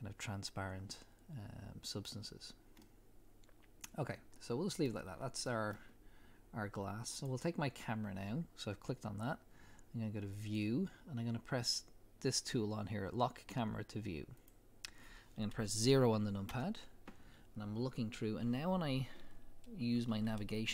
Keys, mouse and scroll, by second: 2.8-7.2 middle drag, 5.1-6.1 scroll down 2, 7.2 click, 10.4 click, 14.4 click, 16.5 KP_0.